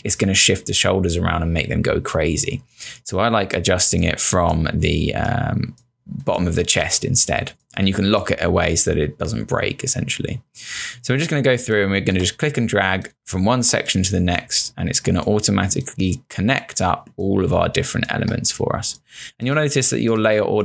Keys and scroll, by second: 6.3 space, 11.6 space, 15.0 space, 17.6 space.